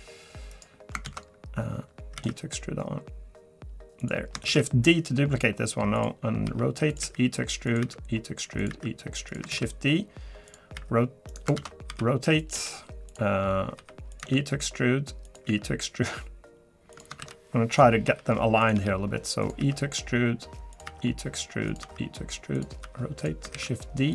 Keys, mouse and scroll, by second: 1.0 ctrl+z, 2.2 e, 4.5 shift+d, 6.4 r, 7.0 e, 7.8 e, 9.5 shift+d, 10.8 e, 11.6 ctrl+z, 11.9 r, 12.5 g, 14.2 r, 14.2 e, 15.5 e, 17.2 shift+d, 18.1 r, 18.7 g, 19.6 e, 20.8 e, 22.8-24.1 typing.